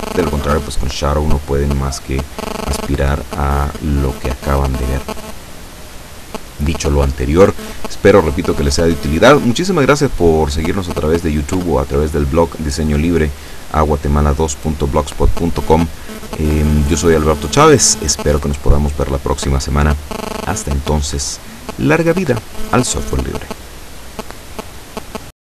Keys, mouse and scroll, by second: 0.7 middle click, 0.8 scroll up 2, 1.4 middle click.